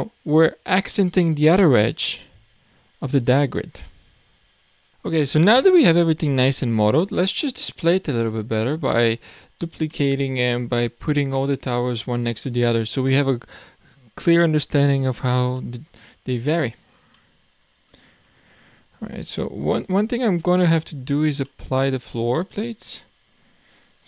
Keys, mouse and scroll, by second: 2.7-3.2 scroll down 7, 3.3-4.9 middle drag, 4.9-6.4 scroll down 1, 6.4-8.2 middle drag, 8.2-8.5 scroll down 1, 8.5-9.2 scroll up 5, 9.3-9.9 scroll up 3, 9.9-12.7 shift+middle drag, 12.7-13.1 scroll down 3, 13.1-14.3 middle drag, 14.3-15.0 scroll up 8, 15.0 scroll down 2, 15.6-16.2 middle drag, 16.2 scroll up 1, 16.4-17.2 scroll down 5, 17.2-18.5 middle drag, 18.5-19.3 scroll up 2, 19.3 click, 19.8-20.2 scroll down 3, 20.2-23.6 middle drag, 23.6 click.